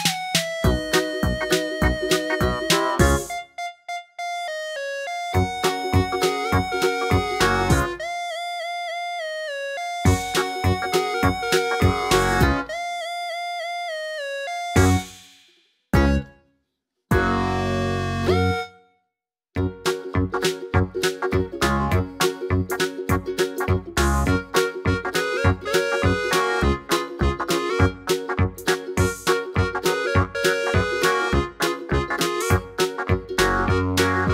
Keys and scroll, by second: 5.2 super+d, 16.6 BackSpace, 20.5 Left, 20.6 Left, 21.2 Left, 21.7 Right, 21.8 Right, 21.9 Right, 26.9 Up, 27.1 Up, 29.2 super+d.